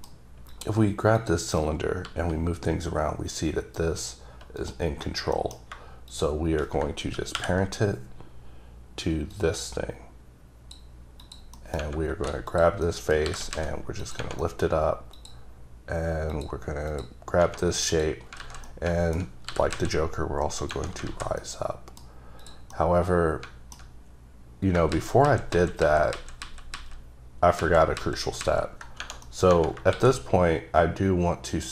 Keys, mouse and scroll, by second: 0.1-0.6 scroll down 4, 0.6 click, 1.3 click, 2.2 g, 4.7 right click, 5.1-5.5 scroll up 3, 5.5 middle click, 5.8 shift+middle click, 6.2 shift+click, 7.5 ctrl+p, 9.5 click, 11.3 click, 11.7 middle click, 12.3 3, 12.6 click, 13.0 middle click, 13.4 g, 13.7 z, 14.1 click, 14.5 middle click, 15.3 click, 16.5 click, 18.0 click, 18.5 alt+z, 18.8 middle click, 19.6 g, 19.9 z, 20.7 click, 21.2 alt+z, 21.5 middle click, 22.5 click, 22.9 middle click, 24.1 scroll up 1, 25.0 ctrl+z, 25.4 ctrl+z, 25.9 ctrl+z, 26.3 ctrl+z, 26.6 ctrl+z, 27.7 ctrl+z, 28.1 ctrl+z, 28.5 ctrl+z, 29.4 middle click, 30.1 s.